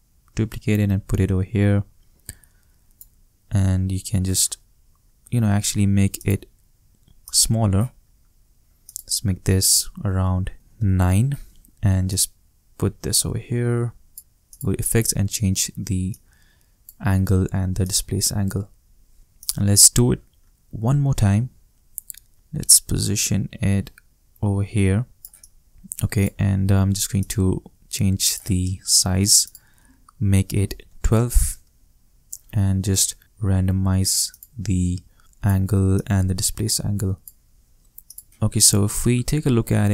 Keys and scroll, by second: 10.5 shift+9, 10.7 Return, 21.3 shift+super+d, 30.4-31.3 typing, 31.5 shift+Return, 39.3 shift+space.